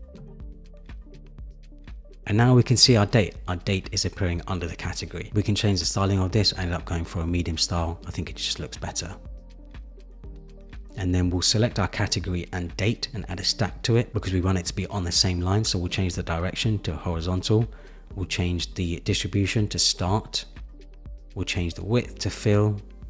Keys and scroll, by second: 22.6 Return.